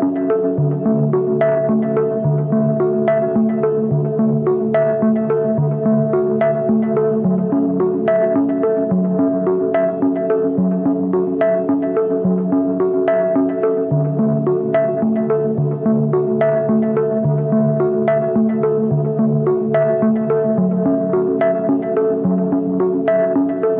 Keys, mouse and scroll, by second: 3.9 Return.